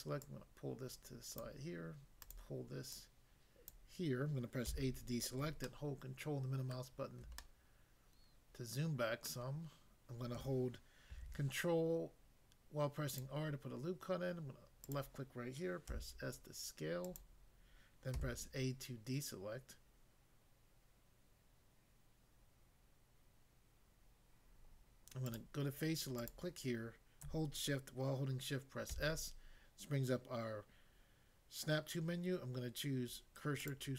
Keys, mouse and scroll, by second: 0.2 click, 1.4 click, 2.3 click, 2.9 click, 3.7 click, 4.7 a, 5.6 ctrl+middle click, 9.3 middle click, 11.1 ctrl+r, 13.1 click, 14.9 click, 15.9 s, 17.0 click, 18.2 a, 25.3 click, 26.2 click, 28.9 s, 33.6 click.